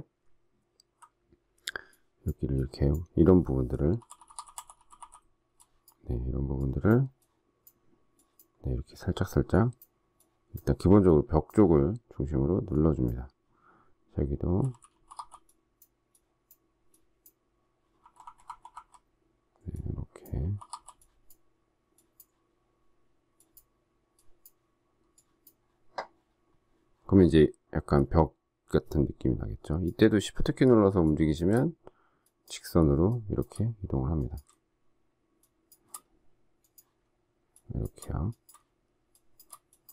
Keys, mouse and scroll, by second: 3.9-5.4 typing, 14.4-15.1 typing, 19.8-20.6 typing, 31.0 shift+click, 33.0 shift+click, 35.4 shift+click, 37.5 shift+click, 39.1 shift+click.